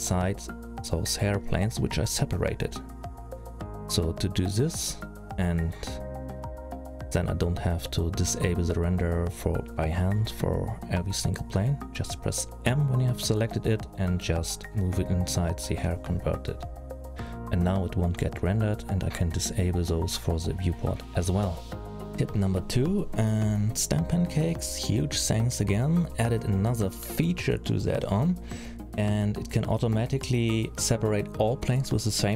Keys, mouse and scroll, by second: 0.5 click, 0.7 click, 1.3 click, 7.4 middle click, 9.9 click, 10.4 click, 11.7 m, 18.0 click, 18.9 middle click, 22.1 click, 22.1 scroll up 3, 22.3 middle click, 23.5 middle click, 26.4-26.8 scroll down 4, 26.8-27.1 scroll up 5, 28.4 F3, 31.2 p.